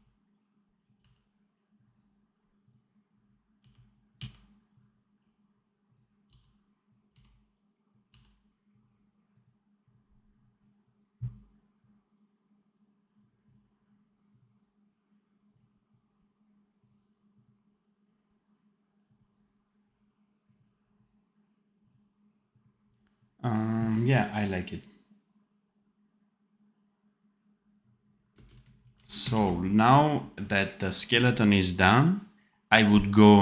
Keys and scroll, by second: 0.9 v, 3.5 d, 6.2 v, 7.1 x, 8.0 v, 23.5 d, 28.2 space, 28.7 ctrl+b, 29.3 super+b.